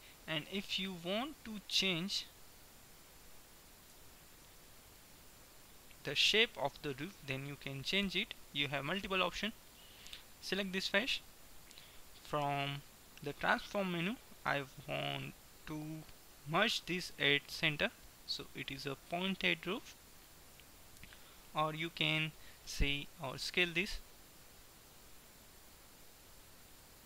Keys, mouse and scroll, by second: 0.9 right click, 1.7-2.7 middle drag, 3.0-4.0 middle drag, 4.0 Tab, 4.5 middle click, 5.5 Tab, 9.7-11.7 drag, 10.7-12.5 right drag, 12.5 t, 14.9-18.5 drag, 18.5-20.9 middle drag, 20.9 ctrl+z, 21.5-24.0 middle drag, 23.4 s, 25.0 s.